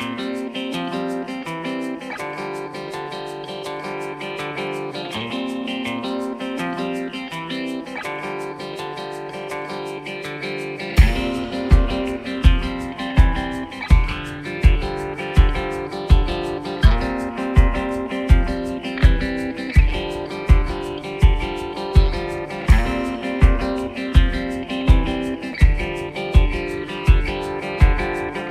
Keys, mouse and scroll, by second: 1.1 right click, 1.7 click, 2.2 right click, 2.5 click, 2.9 right click, 3.3 click, 4.1 click, 5.7 click, 7.7 click, 9.0 click, 9.0-13.0 drag, 13.1 right click, 13.7 click, 14.4 right click, 14.7 click, 15.6 right click, 15.9 click, 16.6 right click, 17.7 click, 18.5 right click, 18.8-20.7 typing, 19.0 click, 20.2 right click, 20.7 click, 21.3 right click, 21.7 click, 23.5 click, 23.9 right click, 24.3 click, 24.7 right click, 24.9-28.5 typing, 25.2 click, 26.3 click, 26.9 right click, 27.4 click.